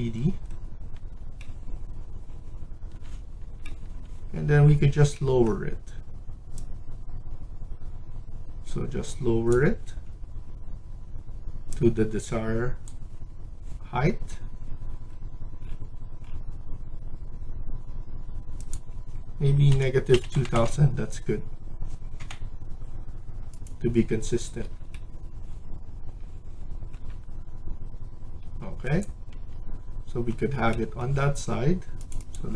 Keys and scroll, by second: 19.4-20.7 typing, 22.1 0, 24.3 Escape, 28.3 Escape, 29.2 Escape.